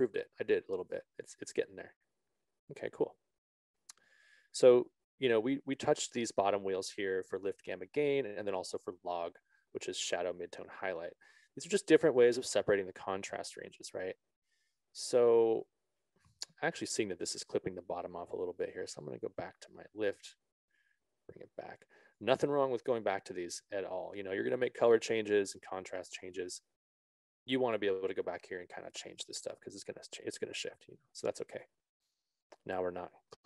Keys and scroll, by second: 7.5 ctrl+z.